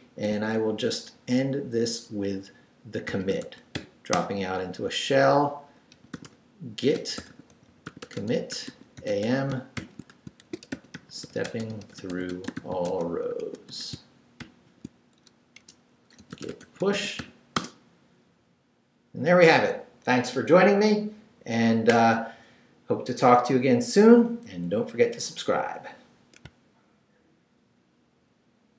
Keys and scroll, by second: 0.3 shift+space, 2.8-4.2 typing, 5.7-14.4 typing, 15.6 shift+Return, 16.0-17.7 typing.